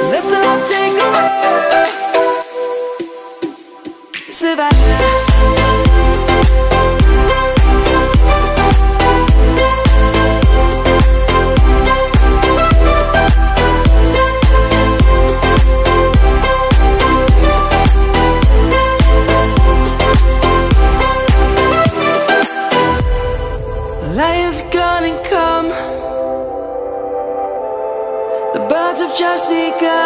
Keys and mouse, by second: 0.2 ctrl+z, 0.6 ctrl+z, 0.9 ctrl+z, 1.1 ctrl+z, 1.3 ctrl+z, 1.6 ctrl+z, 1.8 ctrl+z, 2.4 ctrl+z, 2.7 ctrl+z, 2.9 ctrl+z, 3.1 ctrl+z, 3.4 ctrl+z, 3.6 ctrl+z, 4.1 ctrl+z, 4.4 ctrl+z, 4.8 ctrl+z, 5.1 ctrl+z, 5.9 ctrl+z, 6.4 ctrl+z, 11.9 click, 12.6 middle click, 17.7 ctrl+z, 18.4 middle click, 20.4 middle click, 26.1 click, 27.3 middle click, 28.4 click, 29.5 middle click.